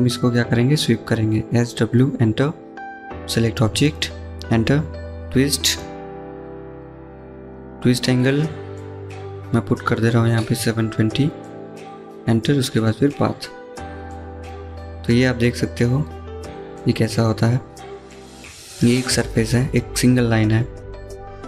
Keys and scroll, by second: 0.0-0.6 typing, 9.0 typing, 10.7-11.4 typing, 17.2-17.9 typing.